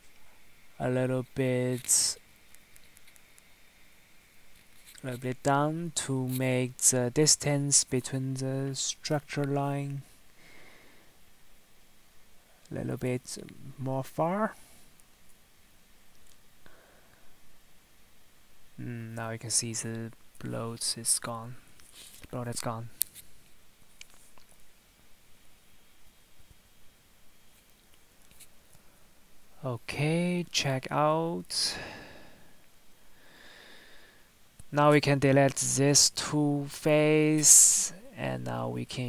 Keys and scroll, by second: 0.1 ctrl+z, 7.8 ctrl+z, 8.2 Tab, 9.0 Tab, 13.0 Tab, 14.3 Tab, 18.2 Tab, 21.6 Tab, 22.6 Tab, 23.0 Tab, 32.4 Delete, 34.2 Delete.